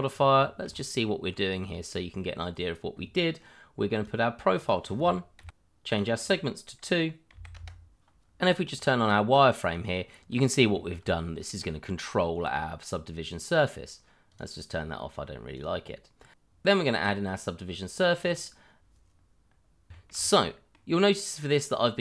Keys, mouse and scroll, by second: 0.1 scroll up 1, 0.4 shift+middle click, 0.6-1.0 shift+scroll up 1, 1.0 middle click, 1.5 scroll down 1, 1.7 shift+middle click, 4.6 click, 5.4 1, 5.5 Return, 5.9 click, 7.3 2, 7.5 Return, 8.6 click, 10.3-10.6 scroll up 1, 10.7 shift+middle click, 11.0 middle click, 14.3 click, 19.4 middle click, 19.9 shift+middle click, 19.9 middle click, 20.0 shift+middle click, 20.2-20.5 scroll up 1, 20.5 middle click.